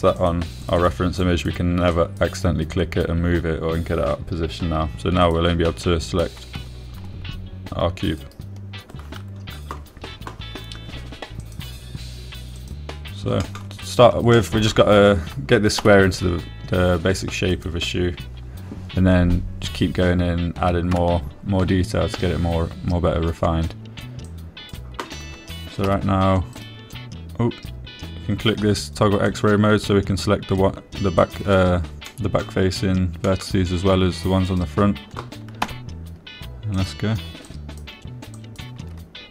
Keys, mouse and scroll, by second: 0.3 click, 1.5 click, 2.1 click, 2.6 click, 3.3 click, 6.6 click, 7.9 g, 9.6 right click, 12.8 click, 14.8 shift+drag, 15.7 shift+drag, 17.2 g, 18.9 click, 22.3 Tab, 25.6 click, 27.2 g, 27.9 right click, 30.7 click, 32.7 click, 33.4 middle click, 34.6 middle click, 35.8 click, 37.0 g, 38.1 click, 38.8 click.